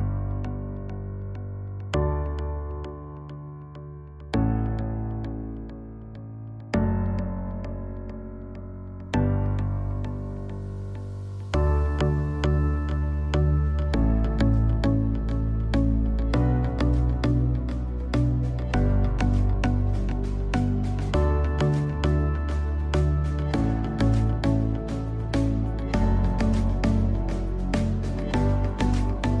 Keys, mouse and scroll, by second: 0.9 ctrl+space, 1.1 ctrl+click, 1.4 ctrl+space, 2.0 space, 4.0 space, 5.9-16.0 drag, 19.9-29.4 alt+drag.